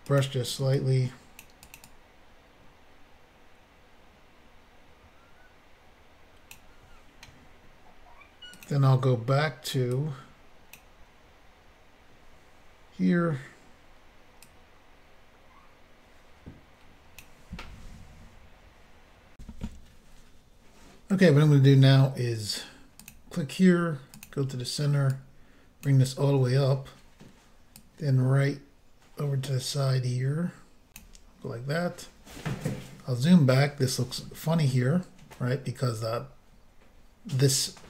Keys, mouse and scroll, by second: 0.1 click, 0.7 click, 1.7 click, 1.9 click, 8.5 click, 8.7 click, 9.9 click, 11.7-12.0 scroll up 1, 14.5 click, 19.4 Insert, 23.1 click, 24.2 click, 25.2 click, 27.8 click, 32.3 scroll down 2.